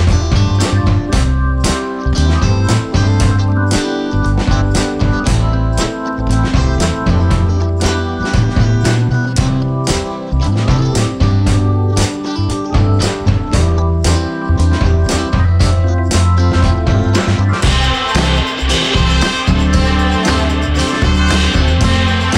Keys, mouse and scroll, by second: 5.0 shift+f, 5.6 shift+e, 8.1 shift+e, 13.6 click, 16.8 alt+scroll up 1, 17.7 space, 17.9 click, 18.0 space, 19.7-21.9 drag, 21.9-22.3 drag.